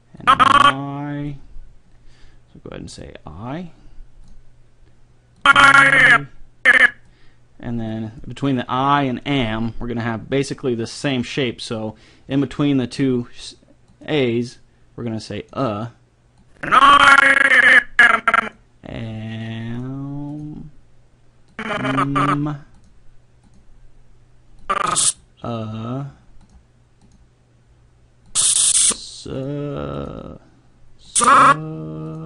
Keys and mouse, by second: 0.2-1.9 drag, 3.0-7.2 drag, 7.9-9.7 drag, 13.9-18.2 drag, 19.8-23.4 drag, 31.6-32.2 drag.